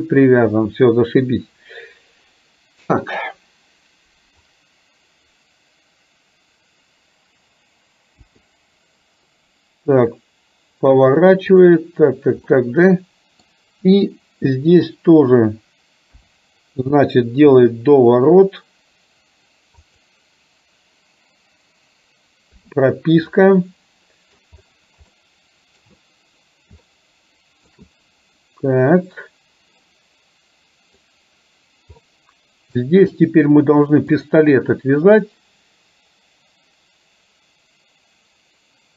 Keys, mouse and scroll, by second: 8.2 i, 11.6 click, 12.6-13.5 middle drag, 16.2 KP_7, 17.6 r, 22.6 i, 23.4-24.5 middle drag, 25.2-25.9 middle drag, 26.9-27.7 shift+middle drag, 30.0-31.1 middle drag, 32.1-32.9 middle drag.